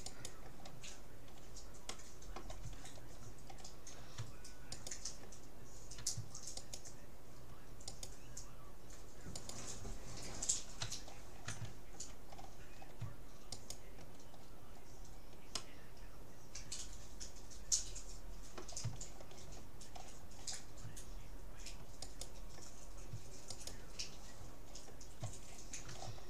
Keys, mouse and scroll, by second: 0.1-1.7 right drag, 1.9-4.7 middle drag, 4.7-6.5 right drag, 6.7-9.5 right drag, 12.3-13.5 scroll down 1, 13.5 right click, 14.7 right click, 15.5-17.3 middle drag, 19.1-20.1 middle drag, 20.1-21.1 scroll up 1, 21.1-22.1 middle drag, 22.1-25.1 right drag.